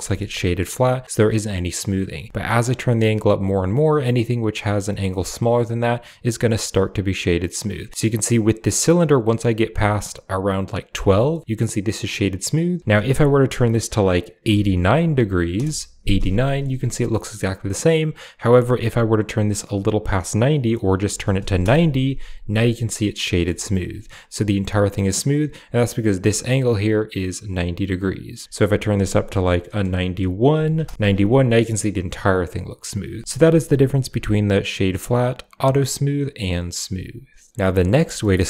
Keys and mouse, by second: 0.3 middle drag, 2.1-10.9 drag, 11.2 middle drag, 12.8-15.5 drag, 16.3 shift+middle drag, 17.0 middle click, 18.2-21.5 drag, 23.2 middle click, 23.4 shift+middle drag, 28.4-30.8 drag, 32.9 click, 33.5 w, 37.5 a, 37.5 x, 37.9 shift+middle click.